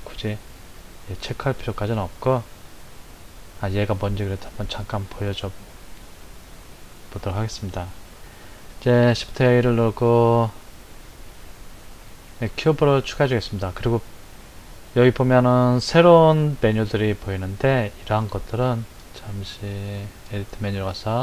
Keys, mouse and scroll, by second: 0.5 click, 6.7 click, 8.7 shift+a, 20.2-21.2 drag.